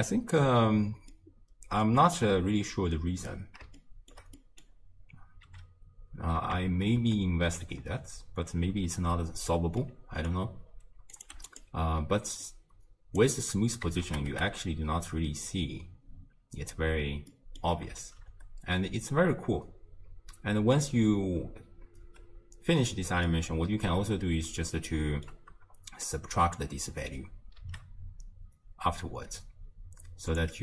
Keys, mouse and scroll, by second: 1.1-5.5 middle drag, 5.5 m, 6.7 shift+space, 8.8 space, 9.2-9.8 scroll up 2, 9.8-11.1 middle drag, 11.1 click, 12.5-14.1 drag, 14.1 shift+space, 16.3 space, 17.3 middle click, 18.1 shift+space, 20.4 space, 21.3 space, 22.0 space, 23.3-26.1 middle drag, 26.1 click, 27.6 shift+d.